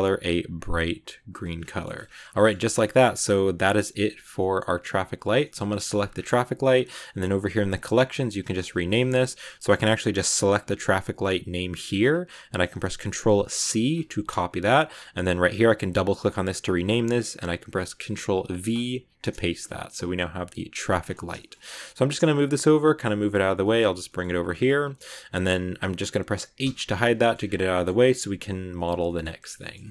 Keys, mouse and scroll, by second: 1.5-2.0 scroll down 3, 1.6 middle click, 2.1 a, 2.2-3.4 shift+middle drag, 3.4-3.9 scroll up 4, 3.9 middle click, 4.1 scroll down 2, 4.3 middle click, 4.8 right click, 5.3 shift+middle click, 5.5 scroll up 1, 5.6 middle click, 5.9 scroll down 2, 6.0-6.6 scroll up 7, 6.6 scroll down 2, 6.8 scroll up 2, 7.8 click, 7.9-9.7 drag, 10.4 click, 10.5-13.6 drag, 15.8 click, 15.9-19.1 drag, 20.9 scroll down 2, 21.3 shift+middle click, 21.5 scroll down 1, 21.6 scroll up 1, 21.6 scroll down 1, 21.9 g, 23.4-23.7 shift+scroll down 2, 23.5 shift+middle click, 23.9 g, 24.7-25.2 scroll up 1, 25.2-26.5 middle drag, 26.5 h, 27.1 shift+middle click, 27.2-28.6 shift+scroll up 6, 27.6 shift+middle click, 28.6 middle click, 29.5 scroll up 1, 29.7 middle click.